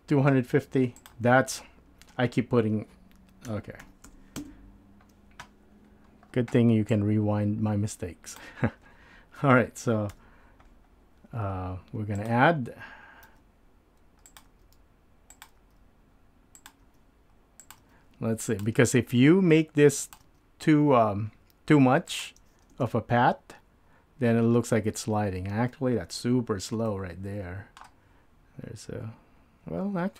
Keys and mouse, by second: 6.9-8.4 drag, 10.1 KP_7.